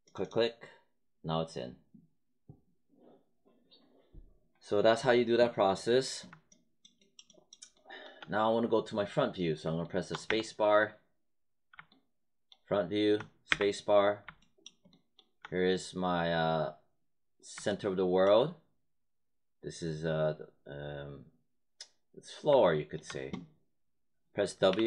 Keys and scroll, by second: 10.2 space, 13.4 space, 24.6 w.